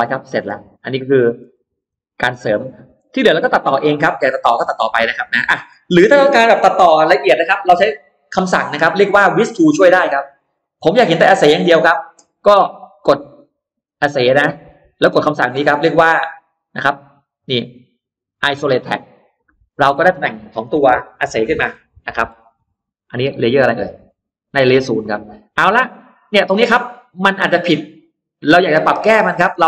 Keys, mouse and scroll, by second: 0.5 middle click, 0.7 space, 1.4 middle click, 1.4-2.3 scroll up 2, 1.7 click, 2.3 middle click, 2.8 scroll down 2, 3.1-3.5 scroll up 2, 3.2 middle click, 3.8 scroll down 2, 4.7-5.1 scroll up 2, 4.9 middle click, 9.4 middle click, 9.5-10.2 scroll down 2, 10.2-10.7 scroll up 2, 10.4 middle click, 10.7-11.1 scroll down 1, 11.1-11.5 scroll up 2, 11.5 middle click, 14.2 click, 18.7 click, 19.4-21.0 scroll down 6, 20.6 middle click, 21.3-22.0 scroll up 2, 21.7 middle click, 22.5 space, 22.9 click, 24.5 scroll down 2, 24.9-25.2 scroll up 2, 25.9-26.2 scroll up 2, 26.0 middle click, 26.4-26.7 scroll down 2, 27.1-29.6 middle drag.